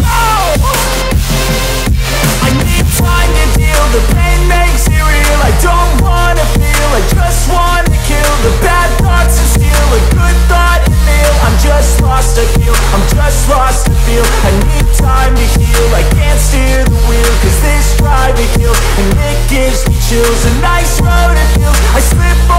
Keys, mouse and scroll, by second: 0.0-1.9 right drag, 2.2 Escape, 3.0 click, 4.5-8.6 right drag, 8.1 w, 9.3 s, 10.3 space, 11.2 w, 15.0 Escape, 16.0 click, 17.3 right click, 18.6 Escape, 19.3 click, 20.8-22.4 right drag.